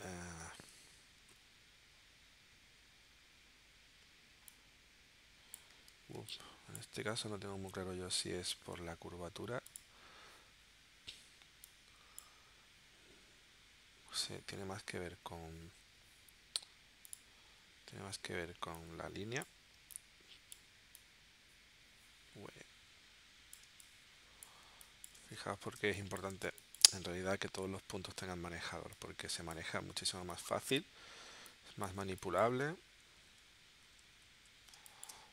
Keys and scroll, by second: 0.6 shift+w, 5.7 super+z, 6.1 space, 8.8 a, 17.9 shift+c, 23.6 space, 25.8 space, 26.6 space, 32.0 space, 34.2 super+z, 34.7 space.